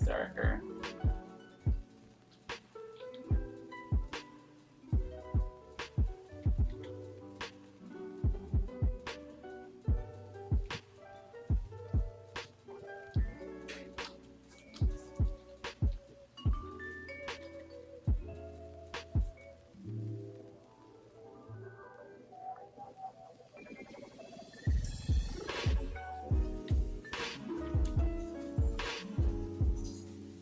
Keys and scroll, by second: 0.0 ctrl+z, 0.8 Escape, 1.9 space, 2.4 r, 2.9 b, 10.6 Escape, 11.9 space, 14.0 space, 15.8 ], 17.4 ctrl+z, 25.5 space, 28.1 x, 29.0 x.